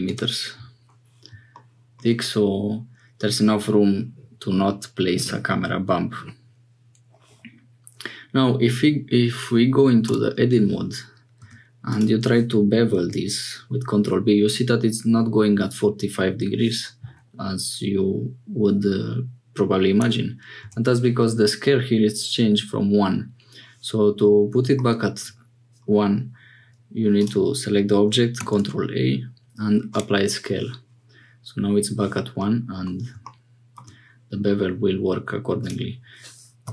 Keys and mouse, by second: 10.1 Tab, 11.4 2, 12.9 ctrl+b, 20.6 Tab, 24.7 shift+click, 27.2 click, 28.3 ctrl+a, 32.5 middle click.